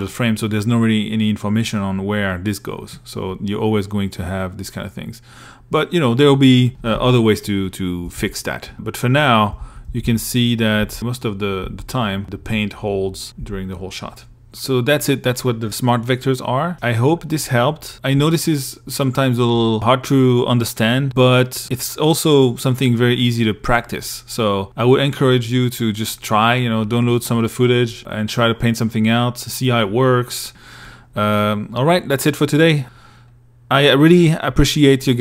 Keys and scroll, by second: 7.3 shift+Right, 8.8 shift+Left, 10.8 shift+Left, 12.4 Right.